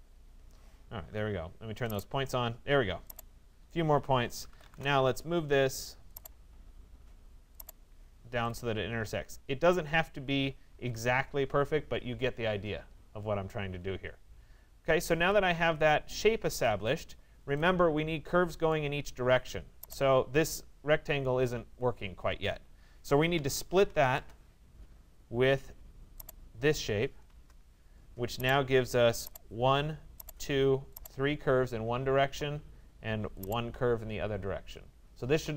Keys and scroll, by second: 4.3 Return, 16.1 Escape, 23.7 Return.